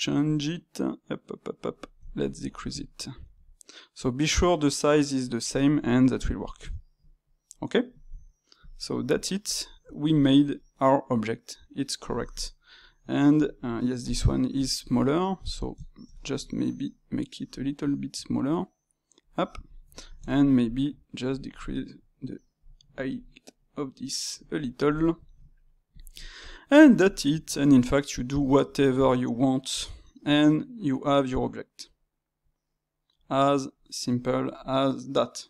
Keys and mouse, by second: 2.0-3.3 ctrl+middle drag, 3.3 s, 5.8-6.1 drag, 6.1-8.5 ctrl+middle drag, 8.5 click, 9.1-12.7 middle drag, 12.7-14.5 drag, 14.5 shift+middle click, 15.4 click, 15.8-17.5 ctrl+shift+middle drag, 17.5 click, 18.0 s, 19.6 click, 19.9-21.2 ctrl+middle drag, 21.2 shift+click, 22.3 middle click, 22.9 g, 24.6-25.9 ctrl+shift+middle drag, 25.9 click, 26.4-31.7 middle drag.